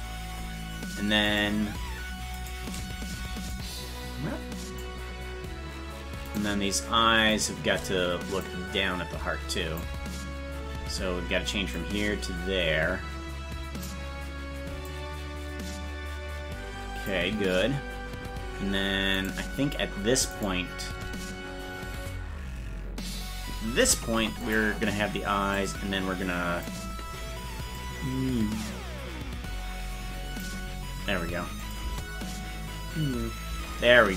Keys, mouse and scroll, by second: 1.4 right click, 2.5 shift+right click, 3.5-4.8 drag, 6.4 right click, 7.5 right click, 8.4-9.8 drag, 11.7-13.8 drag, 14.9-17.1 drag, 19.4 right click, 20.6 shift+right click, 25.6-26.6 drag, 27.7-30.4 drag, 31.6 click, 31.8 space.